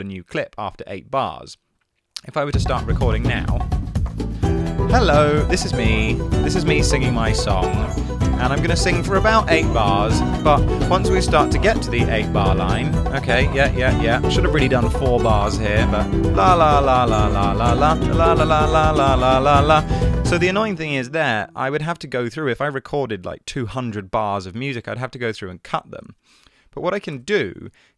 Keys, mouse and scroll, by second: 0.8 Tab, 21.4 space, 27.2 BackSpace.